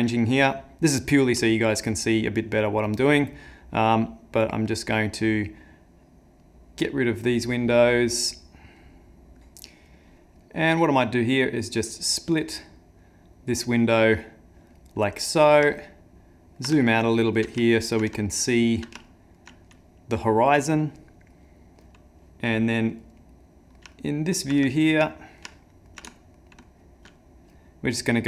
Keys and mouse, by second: 5.0 click, 8.8 click, 9.5 shift+middle click, 11.8 click, 12.2 click, 15.8 ctrl+middle click, 16.8 shift+middle click, 17.6 ctrl+middle click, 18.3 shift+middle click, 19.1 ctrl+middle click, 23.2 middle click, 23.9 ctrl+middle click, 24.7 shift+middle click, 25.2 middle click, 25.6 ctrl+middle click, 26.1 ctrl+middle click, 28.2 shift+middle click.